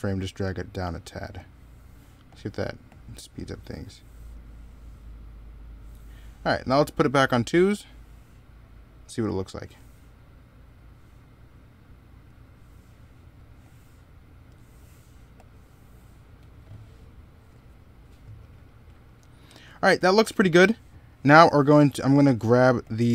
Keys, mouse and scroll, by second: 4.0 middle click, 9.1 right click, 16.6 middle click, 20.5 middle click.